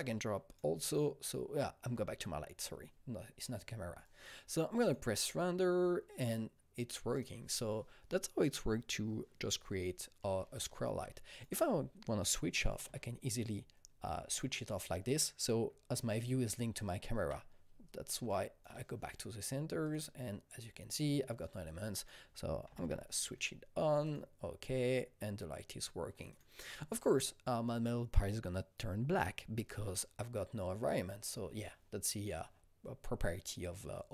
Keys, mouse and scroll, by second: 7.1-11.3 drag, 10.8 alt+Num_Lock, 11.3 click, 12.8 u, 15.9-17.6 typing, 16.1 click, 17.6 click, 17.8 alt+right click, 20.8-21.9 alt+drag, 21.9 alt+click, 22.6 typing, 24.0 click, 26.3 click.